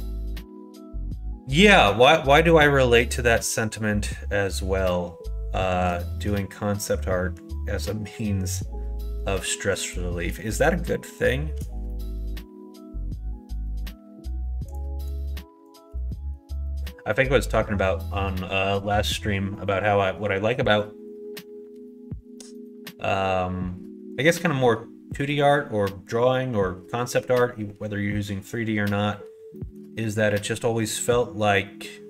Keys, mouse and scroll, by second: 3.1 middle click, 5.9 middle click, 9.8 click, 11.1 shift+click, 11.8-13.8 middle drag, 14.7 click, 15.7 shift+click, 16.0 middle click, 29.5 middle click, 30.9 middle click.